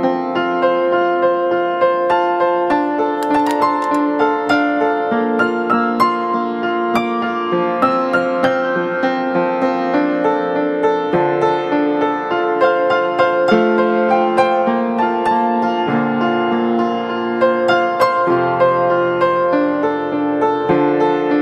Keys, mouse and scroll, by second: 2.4-3.1 scroll up 1, 12.9 [, 13.0 [, 17.9 double click, 18.5 [, 19.0 [.